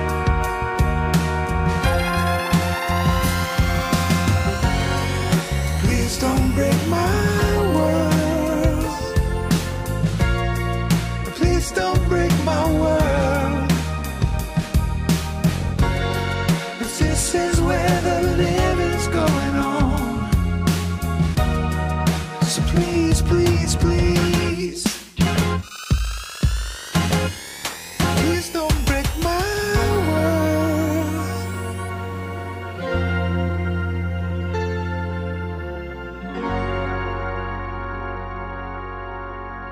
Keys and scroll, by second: 1.4 Tab, 2.4 Tab, 2.5 Tab, 9.1 ctrl+space, 9.7 ctrl+space, 11.5 Return, 11.9 Escape, 15.1 Tab, 16.3 Tab, 18.8 Tab.